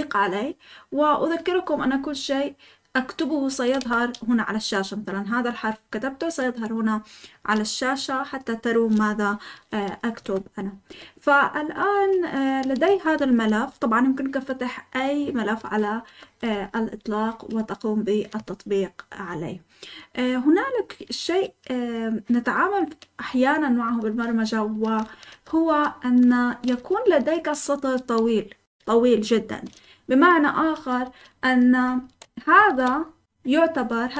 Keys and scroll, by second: 3.8 d, 10.1 Escape, 10.9-13.4 typing, 16.5-17.5 typing, 23.8 typing, 24.9-27.7 typing, 30.5-31.6 typing, 32.7 typing, 33.2 Escape, 34.0-34.1 typing.